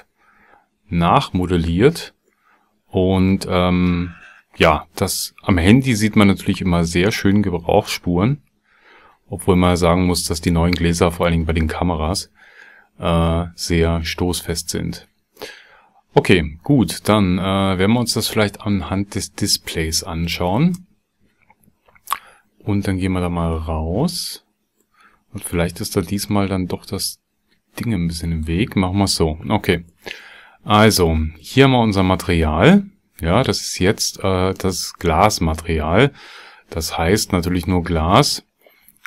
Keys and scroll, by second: 20.6 ctrl+space.